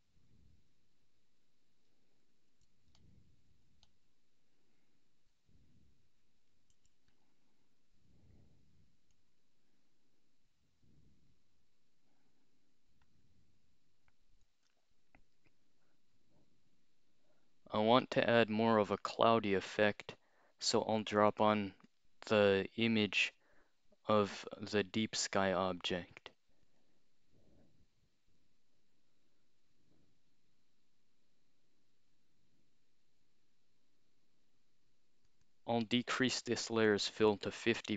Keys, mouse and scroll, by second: 2.5 x, 3.9-5.3 drag, 6.7 x, 7.2 click, 9.2 click, 21.2 click, 21.9 click, 24.8 click, 26.6 click, 35.3 click, 35.5 click, 36.6-37.5 typing.